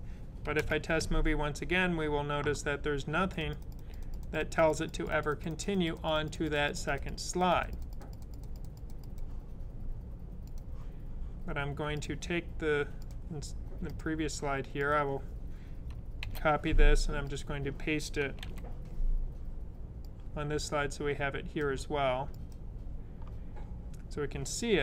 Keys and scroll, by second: 16.1 c, 18.3 super+v.